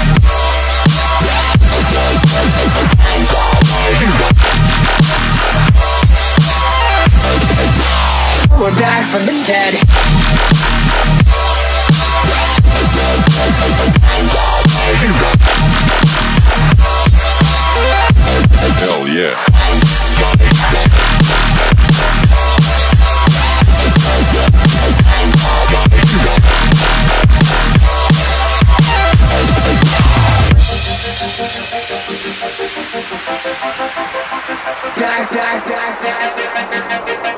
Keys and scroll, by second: 0.6 m, 2.0 Tab, 9.4-9.8 typing, 12.6 typing, 13.3 Return, 16.9 Tab, 18.5 Tab, 21.1 a, 25.6 v, 26.4 Tab, 30.7 space, 31.2 space, 31.2 space, 33.9 super+g, 35.2 m.